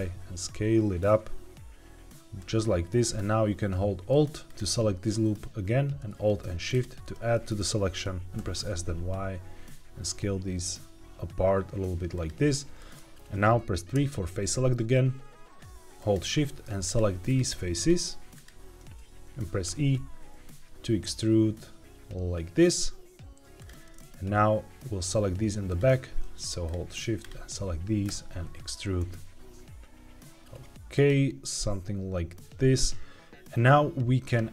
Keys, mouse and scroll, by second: 2.3-5.3 drag, 6.6 alt+shift+click, 8.3 s, 8.5 y, 12.0 click, 12.7 middle click, 13.9 3, 15.9 click, 16.8 shift+click, 18.2 shift+click, 19.6 e, 23.5 click, 25.6 click, 26.6 shift+click, 27.1 shift+click, 28.0 e, 30.8 click.